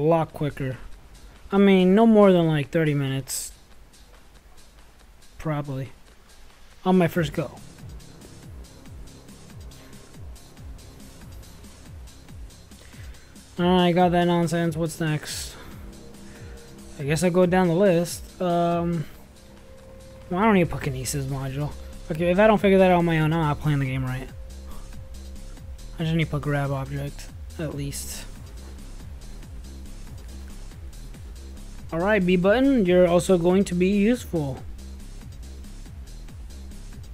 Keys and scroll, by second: 1.9-6.0 typing, 7.2-11.1 typing, 19.1 Escape, 20.8 Escape, 20.8 Tab.